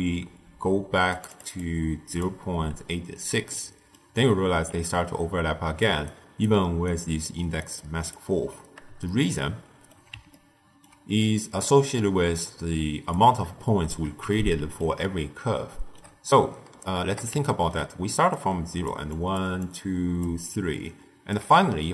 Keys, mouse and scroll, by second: 1.0-3.4 drag, 3.4-6.0 shift+middle drag, 6.0 ctrl+alt+right click, 6.8 alt+right click, 7.5 alt+right click, 9.0-11.1 shift+middle drag, 11.1 d, 11.3-13.0 right drag, 13.0 d, 13.5-18.1 shift+middle drag, 18.1-21.3 typing, 18.2 click, 19.0 click, 19.5 click, 20.4 click, 21.7-21.9 ctrl+middle drag.